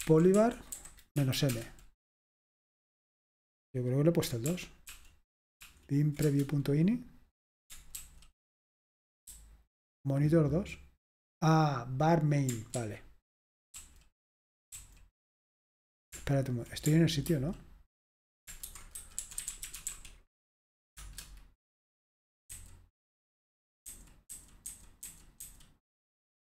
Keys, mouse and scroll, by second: 0.0-1.2 typing, 1.5 Return, 4.5 ctrl+p, 4.9 ctrl+p, 5.6 ctrl+p, 6.3 Return, 8.0 ctrl+d, 9.3-10.3 typing, 12.8 ctrl+d, 13.8 ctrl+d, 14.8 ctrl+d, 17.3 ctrl+d, 18.5-20.4 typing, 21.0 Return, 22.5 n, 23.9 n, 25.0 typing.